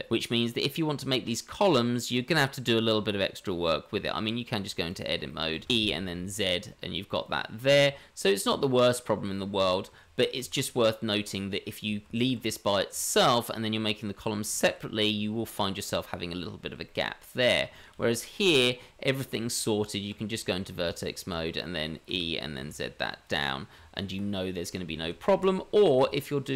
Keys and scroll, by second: 3.9 Tab, 5.6 g, 5.6 e, 7.8 Tab, 10.0 ctrl+z, 10.4 ctrl+z, 12.1 Tab, 19.3 Tab, 22.1 e, 23.7 Tab, 25.0 ctrl+z, 25.3 ctrl+z, 25.9 Tab.